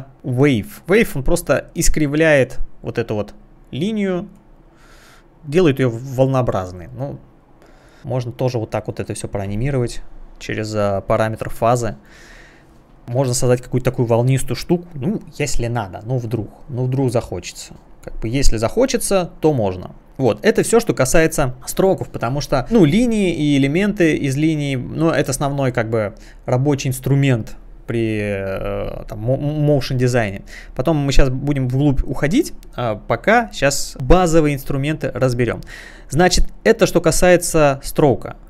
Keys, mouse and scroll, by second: 1.7 click, 4.3 click, 5.4 click, 6.7 click, 7.6 click, 20.1-20.5 scroll up 1, 21.2 click, 35.1 click, 37.8 click.